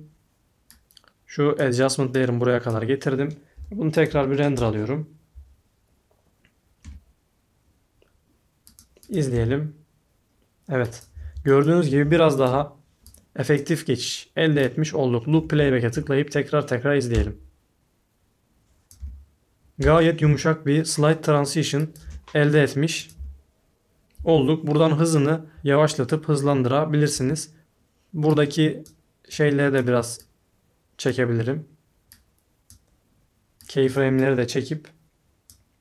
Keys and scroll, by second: 3.6 i, 4.0 o, 4.5 Return, 6.8 space, 9.3 space, 11.1 space, 11.2 alt+x, 12.0 i, 12.5 o, 17.1 space, 19.0-20.2 typing, 22.0 space, 23.1 space, 24.1 space, 27.1 s.